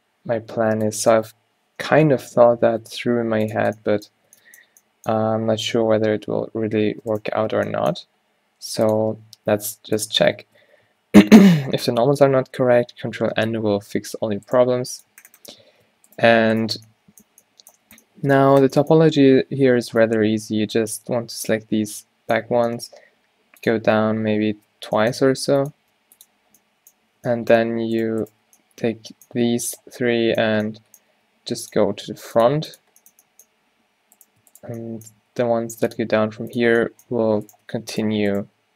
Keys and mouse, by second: 0.7 ctrl+r, 3.1 s, 4.4 Tab, 5.6 Tab, 7.7 g, 10.6 Tab, 10.8 a, 11.0 a, 12.3 ctrl+n, 13.5 Tab, 14.0 a, 15.8 Tab, 19.5 z, 20.8 a, 20.8 b, 23.3 e, 24.6 shift+Tab, 25.0 e, 26.0 g, 27.1 a, 31.3 e, 32.0 r, 32.6 g, 34.2-35.4 drag, 35.5 e, 35.6 click, 36.2 e.